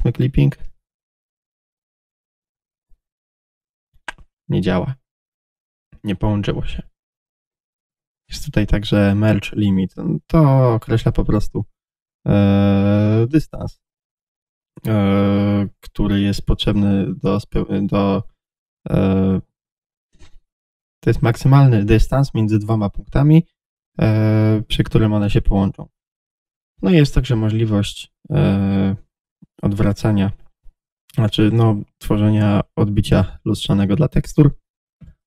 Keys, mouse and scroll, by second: 2.3 click, 2.4 g, 7.5 click, 22.7 click, 35.0 z.